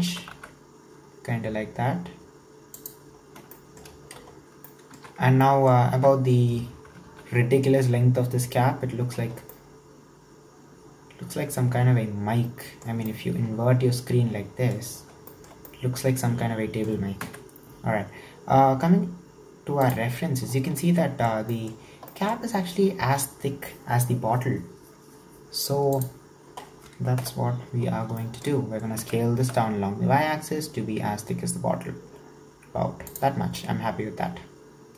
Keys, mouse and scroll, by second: 0.1 s, 3.3 scroll down 2, 3.6 shift+middle click, 4.3-4.7 scroll down 2, 4.7 middle click, 5.4-5.9 scroll down 2, 5.5 middle click, 5.9 Tab, 7.1 alt+z, 9.1-9.5 scroll down 2, 9.5-12.5 middle drag, 13.1-17.3 middle drag, 17.3 KP_1, 18.0-19.9 scroll down 1, 26.5-27.2 scroll up 2, 27.2 KP_7, 27.8-28.2 scroll up 4, 28.2-29.0 shift+middle drag, 29.0 s, 33.4 scroll down 4, 33.6-34.9 middle drag.